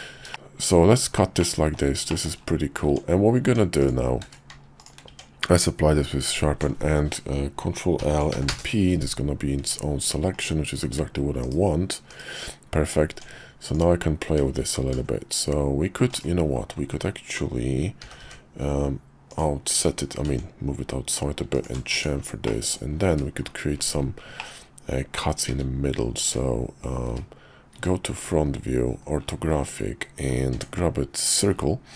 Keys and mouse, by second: 0.3 middle click, 0.3 h, 1.4 middle click, 2.1 shift+middle click, 2.9 Tab, 3.4 Tab, 3.8 click, 4.2 q, 5.1 Tab, 6.2 alt+click, 8.0 ctrl+l, 8.3 p, 9.6 Tab, 10.3 click, 11.4 /, 12.1 /, 13.1 Tab, 13.7 click, 14.8 ctrl+b, 18.0 g, 20.1 ctrl+b, 21.9 Tab, 22.4 middle click, 23.1 `, 24.4 middle click, 25.5-29.5 typing, 30.5 d.